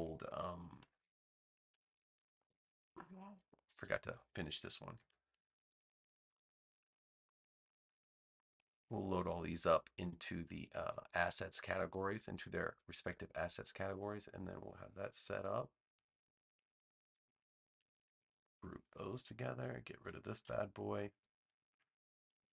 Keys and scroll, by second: 2.1 super+-, 3.1 space, 4.9 super+j, 18.7 super+g, 20.3 BackSpace.